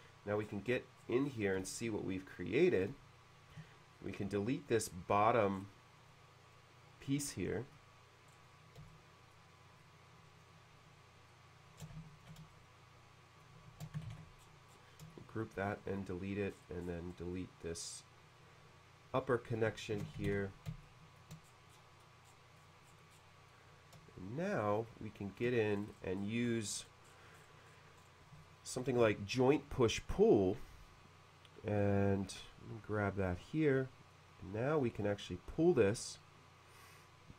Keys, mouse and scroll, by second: 0.4-1.6 scroll down 2, 0.7 middle click, 1.7-3.5 shift+middle drag, 4.0 drag, 5.5 middle click, 6.1 click, 7.2 middle click, 8.3-8.6 scroll down 1, 8.9 shift+middle click, 9.8-10.4 shift+drag, 11.3-12.2 shift+drag, 12.5 shift+middle click, 13.8 shift+g, 14.2 ctrl+d, 14.2 shift+g, 14.4-15.0 scroll up 1, 15.1 shift+middle click, 15.7-16.0 middle drag, 16.5 scroll up 1, 17.3-19.2 drag, 20.0 shift+g, 20.3 d, 20.8 shift+middle click, 21.4-23.2 scroll down 3, 23.5-24.5 middle drag, 24.9 shift+middle click, 25.7-26.5 scroll up 4, 28.0-28.3 scroll up 2, 28.5 click, 28.7 click, 28.9 click, 33.3 click, 34.1-37.3 drag.